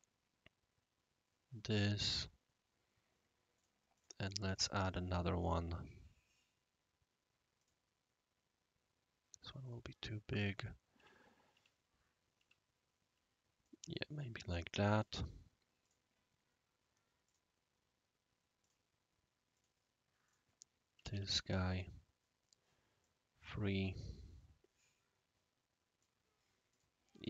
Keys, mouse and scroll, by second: 2.0 click, 3.5 click, 3.9 click, 4.4 click, 5.4 click, 7.6 click, 9.6 click, 10.3 click, 10.9 scroll down 1, 11.5 scroll down 1, 12.3 scroll down 1, 13.6-15.0 right drag, 15.8 click, 17.2 click, 18.6 click, 19.5 click, 20.2 click, 20.9 Down, 21.1 scroll down 5, 23.0-26.0 right drag, 26.7 click, 27.1 scroll down 1.